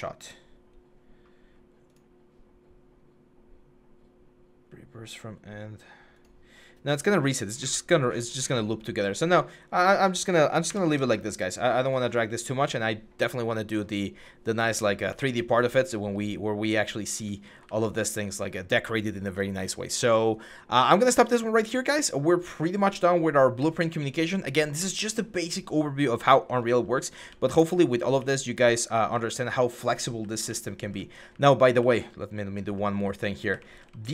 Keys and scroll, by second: 10.5 Delete, 14.4-18.0 typing, 20.2-23.5 typing, 26.4-33.9 typing.